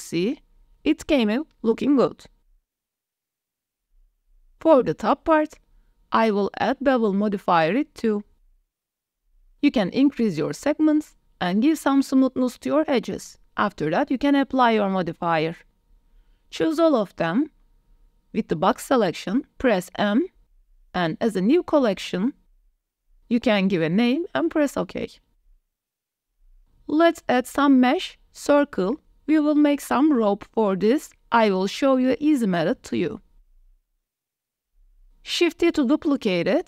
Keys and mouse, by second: 0.4 click, 2.5 shift+drag, 2.7 drag, 3.7 drag, 4.2 Tab, 4.2 click, 4.8 click, 7.4-8.6 drag, 10.8 click, 11.6 click, 13.2-13.6 drag, 14.2 shift+click, 14.8 drag, 15.2 ctrl+s, 15.8-16.4 drag, 16.6-17.0 drag, 19.1 m, 25.2 ctrl+s, 25.3 shift+a, 26.6 shift+a, 30.0 drag, 30.9 KP_7, 31.8 g, 33.0 x, 34.3 shift+middle click, 35.5 KP_7, 36.1 shift+d.